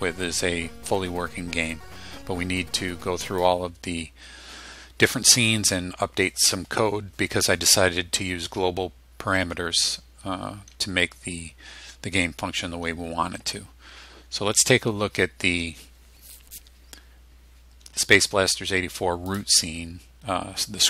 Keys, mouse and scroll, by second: 3.3 click, 19.3 click.